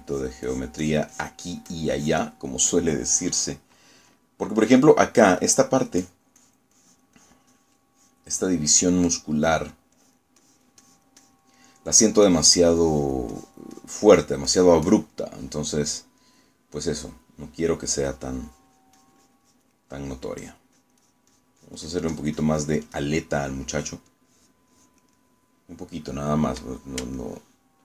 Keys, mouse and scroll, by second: 0.0 click, 0.4-3.4 drag, 3.5-4.5 middle drag, 5.2 middle click, 5.9 middle click, 7.1 click, 7.5-9.4 drag, 9.4 middle click, 10.2 middle click, 11.0 click, 12.6 middle click, 13.4 click, 16.3-18.2 middle drag, 18.8-20.9 drag, 21.0 middle click, 21.5-26.2 drag, 26.2-27.6 middle drag.